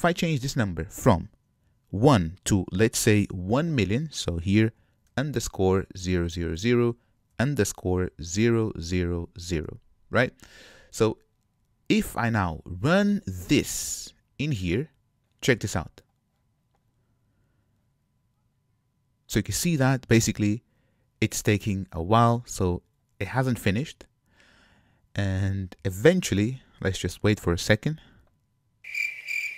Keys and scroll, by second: 16.3 shift+F10.